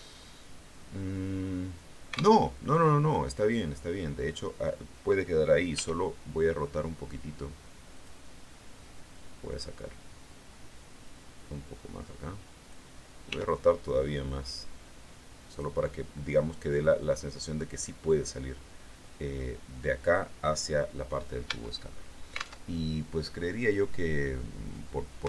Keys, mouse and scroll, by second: 2.3 alt+Tab, 5.7 r, 7.9 click, 9.1-12.8 drag, 13.2 r, 15.4 click, 21.4 Tab, 22.5 alt+Tab.